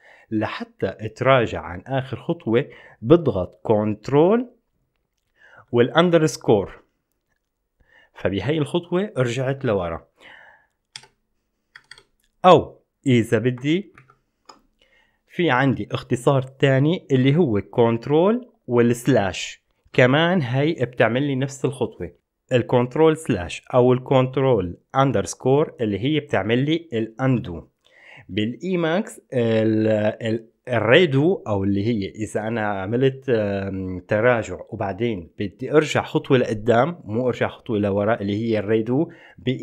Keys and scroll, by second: 6.4 ctrl+shift+_, 11.3 Escape, 12.0 Escape, 12.1 Escape, 14.2 ctrl+shift+/, 19.3 ctrl+shift+/.